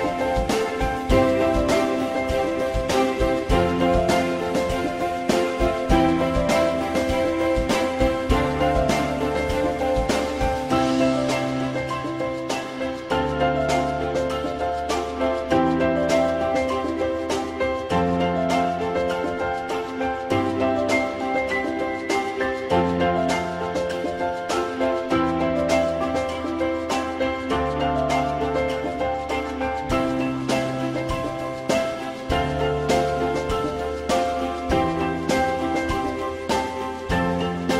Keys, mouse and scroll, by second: 0.8 alt+z, 1.2 alt+middle click, 9.6 F4, 10.3 alt+middle click, 32.7 alt+middle click.